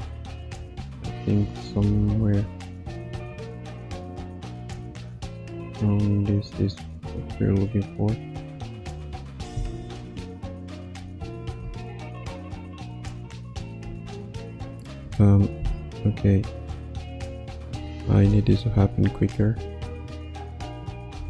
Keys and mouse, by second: 9.6 Left, 9.9 Right, 11.3 click, 11.5 space, 13.8 space, 14.7 click, 16.5-19.4 ctrl+alt+middle drag, 19.4 g, 20.7 click, 21.1 space.